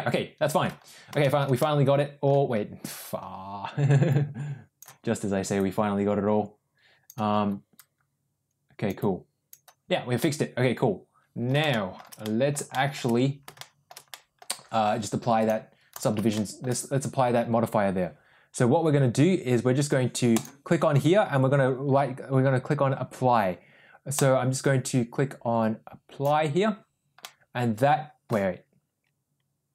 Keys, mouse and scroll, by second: 1.1 shift+middle click, 1.5 middle click, 4.0 click, 5.4-7.0 drag, 7.6-8.8 drag, 8.9 click, 10.1-11.4 middle drag, 11.2 ctrl+z, 11.6 middle click, 12.1 middle click, 12.6 middle click, 13.5 shift+middle click, 14.0 middle click, 15.3-15.9 drag, 16.2 shift+middle drag, 20.3 click, 27.1-28.1 middle drag.